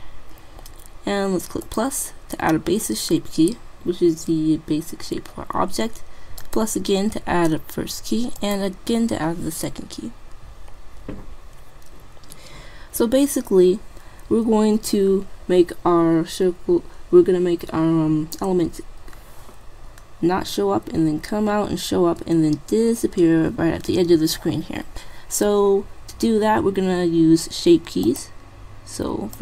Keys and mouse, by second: 1.6-3.4 drag, 6.4-8.4 drag, 8.6-10.2 drag, 28.0-29.4 drag.